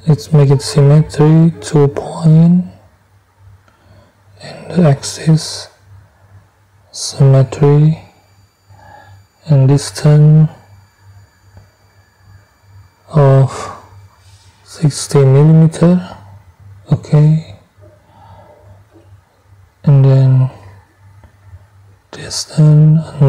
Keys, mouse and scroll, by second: 0.7 click, 3.2 click, 4.9 click, 6.3 click, 8.5 click, 11.9 middle click, 13.5 6, 14.1 0, 15.8 middle click, 16.8 middle click, 19.6 click, 21.2 middle click, 23.1 3.